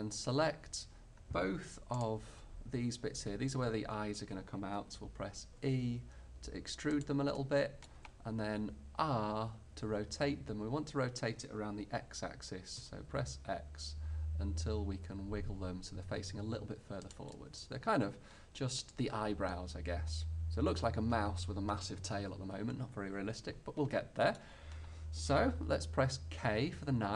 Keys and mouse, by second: 2.0-4.0 middle drag, 5.7 e, 7.5-10.1 middle drag, 9.2 r, 17.5-19.3 middle drag, 26.5 k.